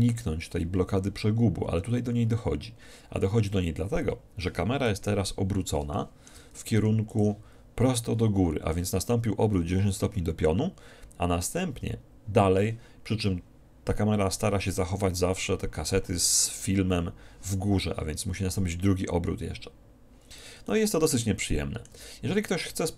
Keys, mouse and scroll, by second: 5.0 KP_1, 6.0 click, 6.9 g, 7.3-9.1 drag, 20.7-22.9 drag.